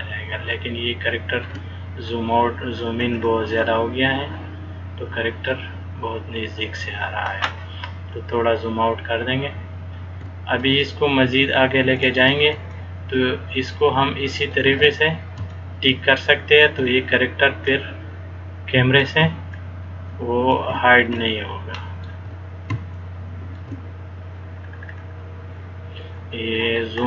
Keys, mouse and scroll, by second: 2.1-2.7 scroll down 1, 2.9-3.4 scroll down 4, 3.6-3.9 scroll up 6, 4.3 scroll down 1, 4.5 scroll up 2, 5.3-5.7 scroll up 1, 6.2 scroll up 2, 8.2-8.8 scroll up 3, 10.8 click, 12.9 shift+middle click, 15.7 shift+middle click, 17.9 click, 19.7 shift+middle click, 21.3 shift+middle click, 22.3 shift+scroll up 1, 23.1 shift+middle click, 24.7-25.3 scroll down 7, 25.7-27.0 scroll up 51.